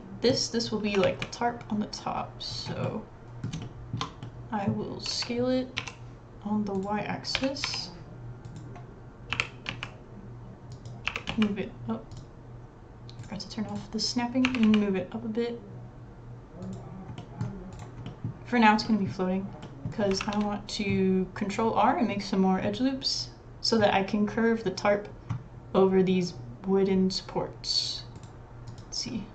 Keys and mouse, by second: 0.8 s, 2.8 middle click, 3.6 shift+middle click, 4.2 middle click, 4.7 click, 5.1 s, 7.3 s, 9.3 g, 9.7 click, 11.1 g, 13.2 click, 13.7 click, 14.4 g, 17.2 middle click, 17.7 click, 18.0 middle click, 18.8-19.9 middle drag, 20.2 ctrl+r.